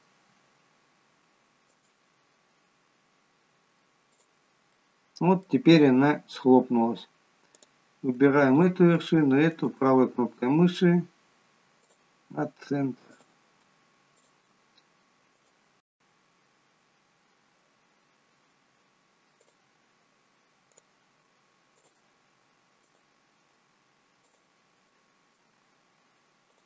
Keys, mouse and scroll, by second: 1.2 shift+click, 1.9 right click, 4.8 middle click, 6.4-6.9 scroll up 1, 7.6 click, 8.7 shift+click, 9.7 right click, 13.3 click, 14.3 shift+click, 15.5 right click, 20.6 click, 21.6 shift+click, 22.9 right click, 24.7 shift+middle click, 25.6-26.1 scroll up 3, 26.4 click.